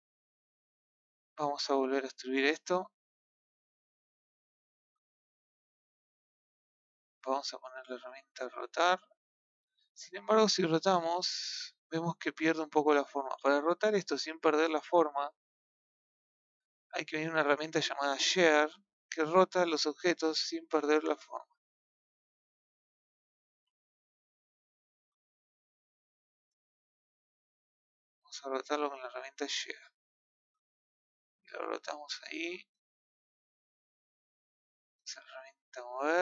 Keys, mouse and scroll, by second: 2.0-3.4 shift+middle drag, 3.4 click, 8.2 click, 9.5 click, 18.1 click, 20.0 click, 25.7 click, 28.4 click, 33.4-34.5 shift+middle drag, 34.5 click, 34.9 scroll up 2, 36.0 click.